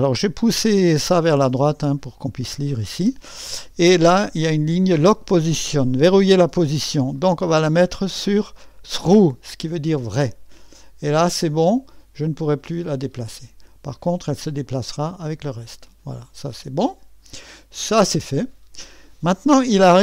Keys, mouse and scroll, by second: 0.5-1.8 drag, 7.1 click, 7.8 click, 9.0 click, 11.6 click, 13.1 click, 14.6-16.1 drag, 16.4-17.5 scroll up 3.